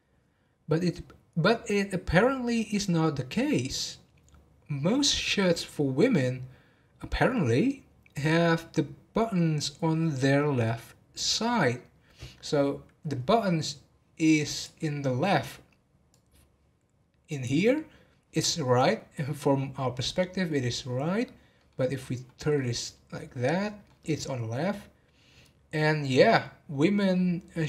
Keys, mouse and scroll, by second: 12.9-14.5 scroll down 2, 14.5-14.9 drag, 14.9-16.1 scroll down 1, 16.1 click, 21.5-25.9 middle drag.